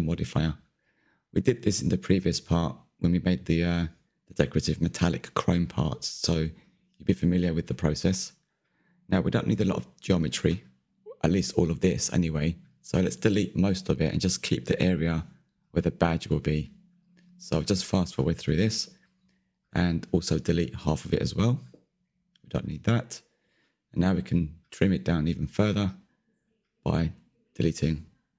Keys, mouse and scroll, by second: 2.4-5.6 drag, 5.6 Tab, 6.6 Tab, 8.3 click, 8.6 Tab, 9.4 1, 10.7 KP_3, 11.4 ctrl+KP_3, 12.6-13.0 scroll up 2, 13.0 shift+middle click, 13.7-15.1 drag, 16.2 shift+click, 16.7-17.7 middle drag, 17.7 Delete, 17.9 middle click, 18.7 click, 18.9 scroll down 2, 19.0-20.5 middle drag, 20.5 KP_1, 20.8 z, 21.7 click, 21.9 middle click, 22.2 z, 22.2 middle click, 22.9 Delete, 23.0 middle click, 23.6 scroll up 2, 23.9 Tab, 24.2-25.3 middle drag, 25.3-26.5 scroll down 1, 26.5 click, 26.8 click, 27.0 click, 27.2 middle click, 27.4 Tab, 27.5 middle click.